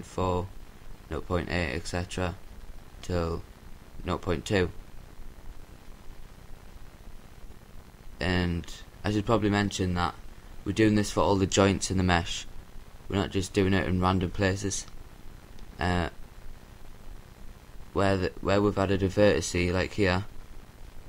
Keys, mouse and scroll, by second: 3.8-5.7 drag, 5.7-8.1 middle drag, 10.1-12.9 drag, 16.1-18.0 drag, 18.7-20.1 drag.